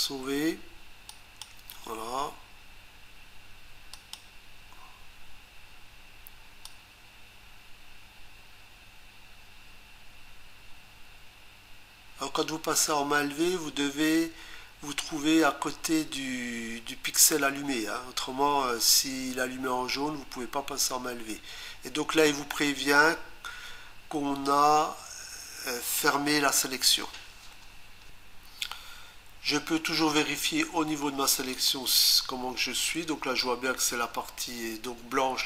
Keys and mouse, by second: 1.1 click, 3.9 click, 6.6 click, 31.5 click.